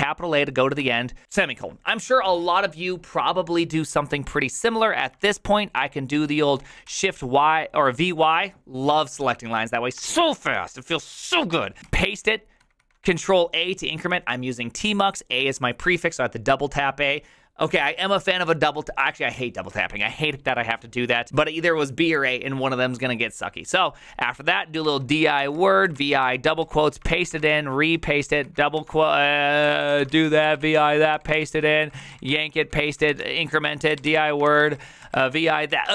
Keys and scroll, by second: 0.0-1.2 typing, 5.2 ctrl+c, 6.8 v, 7.3 y, 9.7-10.7 typing, 11.8 ctrl+c, 11.8 typing, 12.6 ctrl+a, 12.8 ctrl+a, 24.1-35.9 typing, 28.7 ctrl+c.